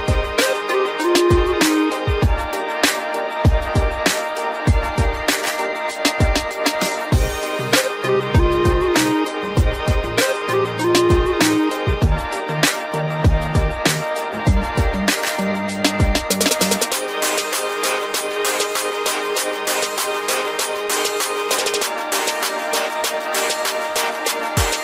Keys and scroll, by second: 0.7 Return, 23.9 ctrl+g, 24.7 ctrl+alt+shift+e.